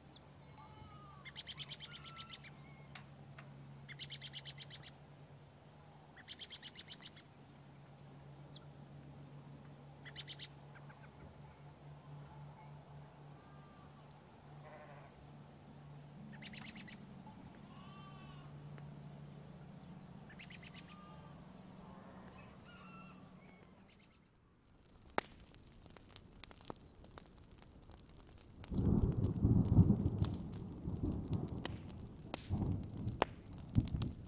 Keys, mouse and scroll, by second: 4.1 alt+scroll down 2, 4.5 click, 6.3 scroll up 1, 6.5-9.9 drag, 10.0 alt+scroll down 1, 10.6-11.8 drag, 12.1 alt+scroll up 1, 12.6 alt+scroll down 1, 13.9 right click, 14.1-17.6 drag, 17.9 alt+scroll up 1, 18.1 alt+i, 18.4-20.4 drag, 20.5 alt+scroll down 1, 20.8 alt+scroll up 1, 21.2 click, 21.7 alt+scroll down 1, 22.3 click, 22.5 alt+scroll up 1, 22.9 click, 24.4 alt+scroll up 1, 24.6 click, 24.9 alt+scroll down 1, 25.1 click, 27.0 alt+scroll up 1, 27.2 click, 27.4-27.8 alt+scroll down 1, 27.8 alt+scroll up 1, 28.1 click, 28.3 alt+scroll down 1, 29.0 click, 30.3 ctrl+z, 30.4 click, 30.6-31.3 scroll up 2, 31.4 alt+scroll down 1, 32.6 alt+scroll up 1, 33.1-34.2 drag.